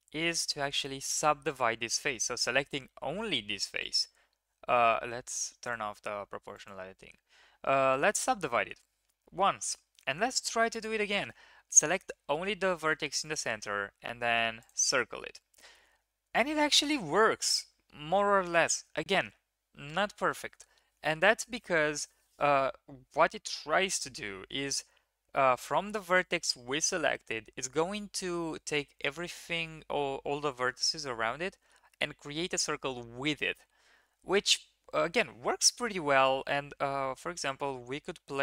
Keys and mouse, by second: 0.4-1.7 drag, 3.8-4.4 drag, 5.6 click, 7.9 click, 8.0 middle click, 9.3-10.4 middle drag, 10.4 1, 10.7 click, 13.3-14.4 drag, 37.8 click.